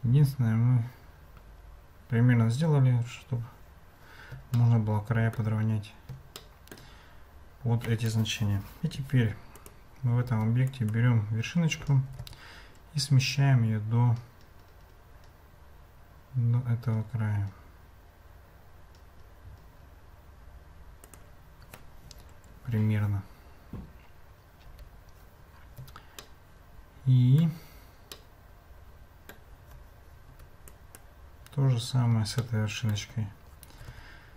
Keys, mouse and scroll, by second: 4.5-5.4 shift+drag, 6.4-6.7 shift+drag, 6.7 shift+middle click, 10.3 Tab, 10.7 middle click, 12.1 g, 24.7 Tab, 26.2-27.5 shift+middle drag, 28.2-29.4 shift+middle drag, 30.3 Tab, 30.7 click, 32.4 shift+click, 32.8 shift+middle click, 33.8 g.